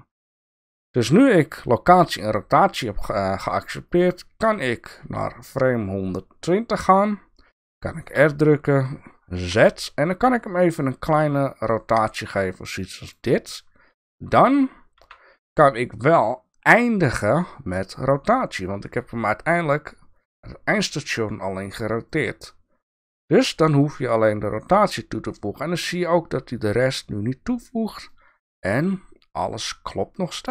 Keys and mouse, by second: 3.9-6.5 drag, 8.2 r, 15.0 i, 28.1-30.5 drag.